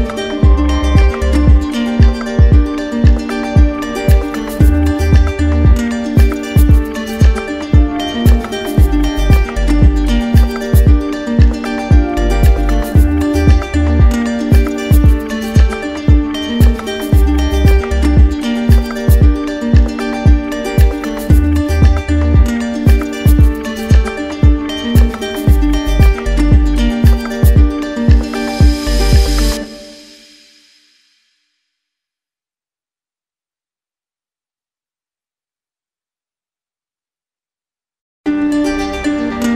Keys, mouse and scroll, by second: 0.1 click, 1.1 click, 1.7 click, 2.3 click, 2.8 click, 3.3 click, 3.9 alt+click, 5.2 click, 5.9 click, 6.5 click, 7.0 click, 8.2 click, 8.6 click, 9.2 click, 10.2 click, 10.9 right click, 11.7 right click, 12.2 right click, 12.8 click, 13.7 click, 14.2 click, 14.6 click, 15.5 alt+click, 16.6 alt+click, 17.5 shift+click, 18.1 shift+right click, 19.5 click, 20.1 right click, 20.9 click, 22.3 click, 22.9 click, 23.5 click, 24.1 click, 24.8 click, 25.5 alt+click, 26.4 right click, 27.2 click, 28.0 click, 28.9 click, 29.7 click, 30.3 click, 30.9 click, 31.5 click, 32.1 click, 32.7 alt+click, 33.3 alt+right click, 33.5 click, 34.1 click, 34.6 click, 35.9 right click, 37.9 click, 38.6 click, 39.3 click.